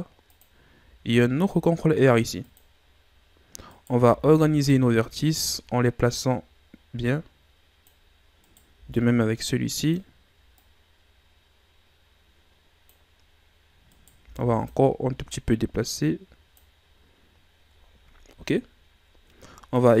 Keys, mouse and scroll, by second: 1.0 ctrl+r, 2.8-3.7 scroll up 2, 3.7 right click, 4.0 b, 5.3-8.3 drag, 8.4 right click, 8.7 b, 10.6-13.6 drag, 13.9 right click, 14.2 b, 15.3-17.1 drag, 17.1 scroll up 2, 18.9-20.0 scroll down 1.